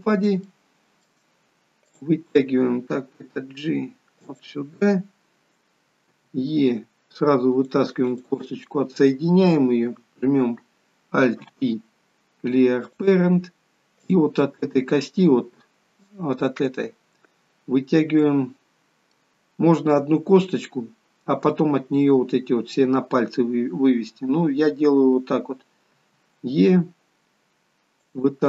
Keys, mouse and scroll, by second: 0.1 scroll up 5, 0.6 shift+middle click, 2.1 click, 3.7 g, 18.5 middle click.